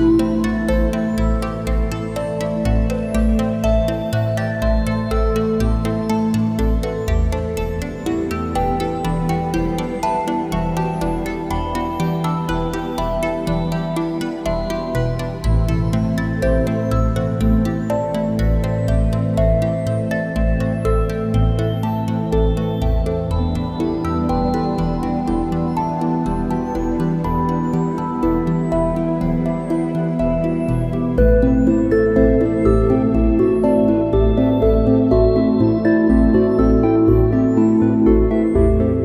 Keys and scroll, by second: 2.6 ctrl+shift+a, 5.8 space, 9.6 `, 9.7 space, 14.3 a, 18.2 space, 21.1 space, 22.6 `, 22.7 space, 30.0 a, 33.0 `, 34.0 ctrl+shift+a, 34.1 space.